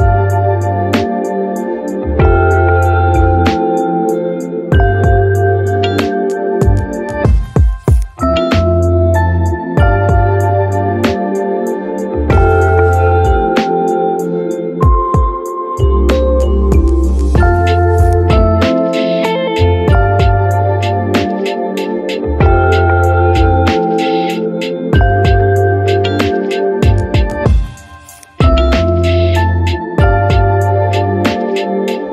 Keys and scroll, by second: 2.3 f, 9.3 ctrl+d, 11.0 j, 17.2 j, 18.7 1, 20.2-21.7 typing, 22.1 ctrl+1, 26.6 ctrl+1, 29.4 1, 29.7 Return.